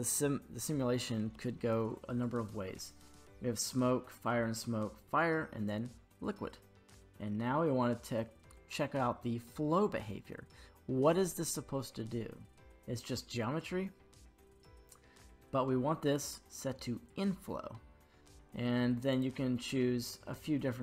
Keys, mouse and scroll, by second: 13.3-16.2 drag, 19.1 click.